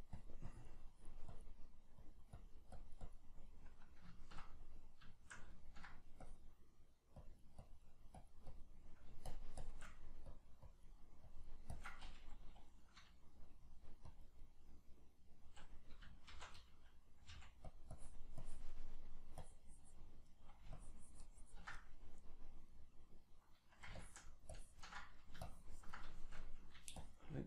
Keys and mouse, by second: 3.5-6.3 middle drag, 6.3-8.8 drag, 8.8 middle click, 9.3 shift+click, 9.9 middle click, 10.3-12.8 drag, 12.8 middle click, 13.7 click, 14.4-17.8 middle drag, 16.3 shift+c, 17.3 f, 17.8 click, 19.0 middle click, 19.4 click, 20.4 middle click, 20.8-21.8 ctrl+drag, 21.8-24.0 middle drag, 24.0-25.0 ctrl+drag, 25.0 middle click, 25.5 ctrl+click, 26.1 shift+middle click, 27.0-27.4 shift+drag.